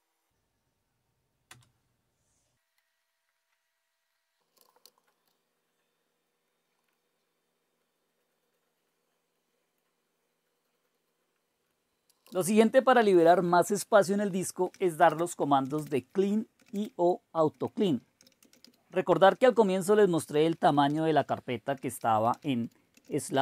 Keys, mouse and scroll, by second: 0.0-0.1 typing, 1.5 Return, 2.8 Return, 4.3-5.3 typing, 6.5 click, 7.4-8.0 scroll up 4, 8.0 scroll down 1, 8.1-9.3 scroll up 2, 9.3 click, 10.2-11.7 scroll down 1, 11.7 click, 12.2-12.6 typing, 14.4-19.0 typing, 20.4-23.4 typing.